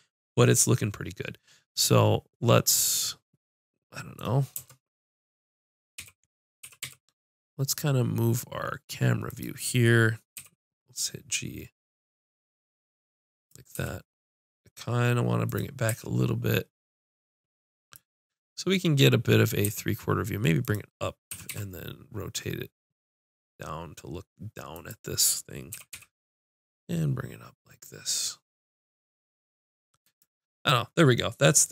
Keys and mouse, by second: 4.6 KP_0, 6.0 g, 10.4 g, 13.5-15.2 drag, 13.9 g, 15.9 g, 19.7 g, 21.3 r, 24.9-26.3 drag, 25.7 g.